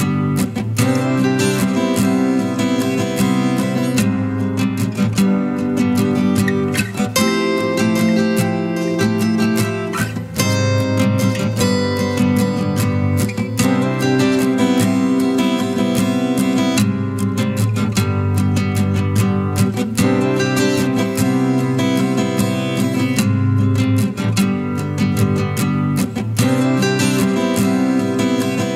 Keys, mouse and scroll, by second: 6.7 scroll down 1.